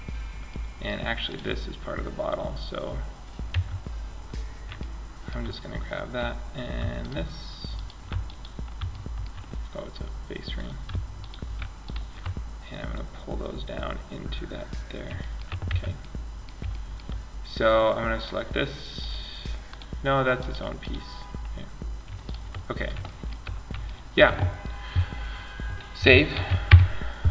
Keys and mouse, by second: 2.7 Tab, 3.6 middle click, 6.2 click, 7.1-10.4 middle drag, 12.9 click, 13.8 middle click, 14.8 Tab, 22.5-25.5 middle drag, 25.5 ctrl+s.